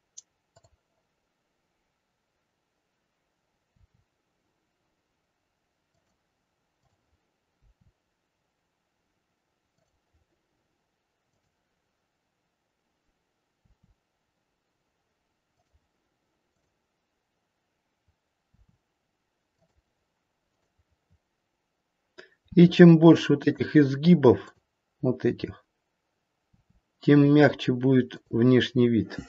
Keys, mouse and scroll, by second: 0.4 click, 2.4 click, 3.6 r, 6.8 click, 8.5 r, 11.2 click, 13.5 r, 16.5 click, 18.5 r, 20.4 click, 22.4 r, 24.3 click, 26.3 r, 28.7-29.2 scroll down 5.